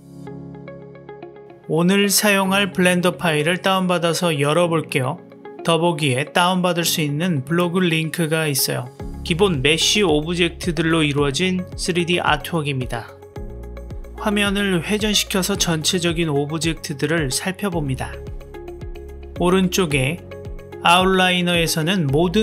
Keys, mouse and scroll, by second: 13.8-18.9 drag, 20.9 click, 22.3 click.